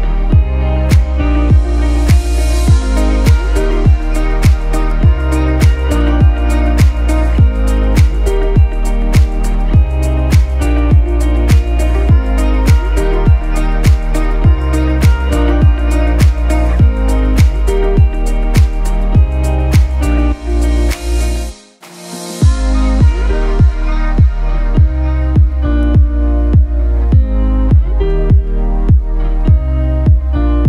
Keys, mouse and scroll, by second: 1.5 shift+7, 2.9-8.5 typing, 10.5 ., 11.1 click, 17.1-17.5 scroll down 1, 17.5-19.5 scroll up 1, 20.0 shift+Num_Lock, 20.0-20.4 scroll up 1, 20.5 shift+click.